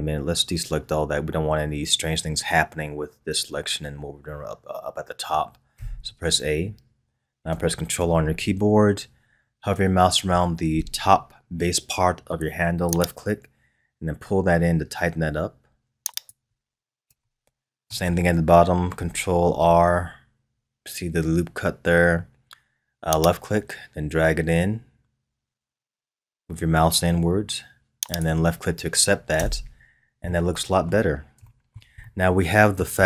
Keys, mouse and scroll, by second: 5.7 a, 8.0 ctrl+r, 17.2-19.4 shift+middle drag, 19.4 ctrl+r, 29.4 Tab, 29.8 scroll down 3, 30.3-33.0 middle drag.